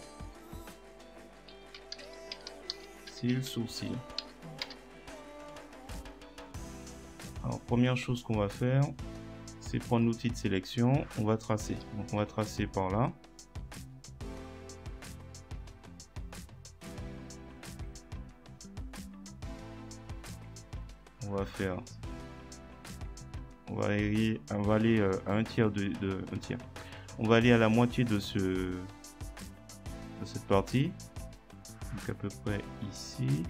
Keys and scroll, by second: 1.6-4.2 typing, 4.6 Return.